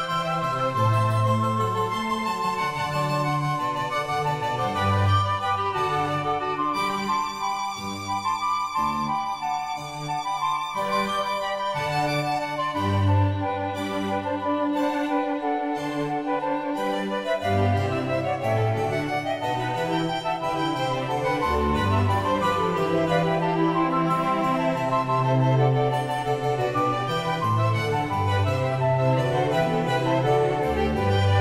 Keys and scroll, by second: 4.5 ctrl+t, 29.3 [.